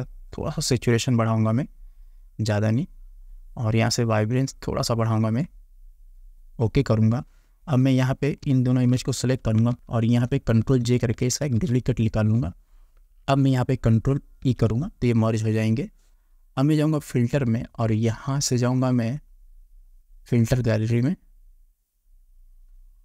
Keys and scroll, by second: 9.7 ctrl+z, 11.5 ctrl+j, 14.5 ctrl+e.